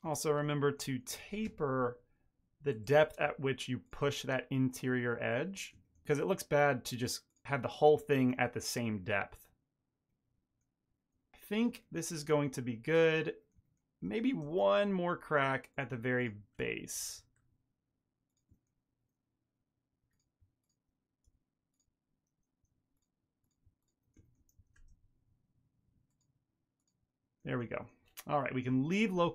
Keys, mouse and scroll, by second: 0.4 shift+click, 0.6 shift+middle click, 0.7 ctrl+middle click, 0.9 middle click, 1.2 alt+s, 2.4 shift+click, 3.0 shift+click, 3.2 middle click, 3.3 ctrl+middle click, 3.6 alt+s, 4.9 ctrl+middle click, 5.0 middle click, 5.4 middle click, 5.5 ctrl+middle click, 6.6 g, 7.3 Tab, 7.4 ctrl+middle click, 7.5 middle click, 7.8 ctrl+middle click, 8.7 ctrl+middle click, 8.8 middle click, 9.1 ctrl+middle click, 9.3 middle click, 9.8 middle click, 11.1 shift+middle click, 11.7 ctrl+middle click, 12.0 middle click, 12.3 shift+middle click, 12.5 middle click, 13.3 middle click, 13.6 ctrl+middle click, 14.1 Tab, 14.5-15.1 ctrl+middle drag, 15.7 click, 16.1 shift+click, 16.9 ctrl+b, 18.1 ctrl+middle click, 18.8 1, 18.9 click, 19.1 shift+click, 19.4 m, 20.1 2, 20.3 click, 20.5 click, 20.7 shift+click, 20.8 middle click, 20.9 ctrl+middle click, 21.1 alt+s, 22.2 shift+click, 22.5 shift+click, 23.2 alt+s, 24.1 middle click, 24.6 r, 25.3 Tab, 25.5 ctrl+middle click, 25.7 middle click, 27.3 shift+middle click, 27.5 ctrl+middle click, 27.8 ctrl+middle click, 28.6 KP_Divide.